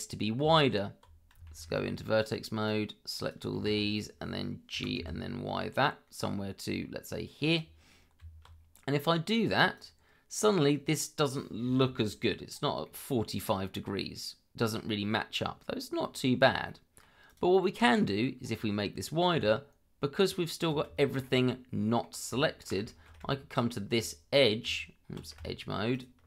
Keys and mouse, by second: 0.4 Tab, 1.5 shift+z, 2.6 click, 4.7 g, 5.0 y, 7.5 click, 8.2 Tab, 9.7 click, 12.8-14.7 middle drag, 15.4-15.9 middle drag, 16.6-17.0 middle drag, 17.2 click, 17.6-18.2 middle drag, 19.3 Tab, 21.0 shift+middle click, 21.5 middle click, 22.9 shift+middle click, 23.5 alt+click, 24.6 Tab, 25.9 alt+click.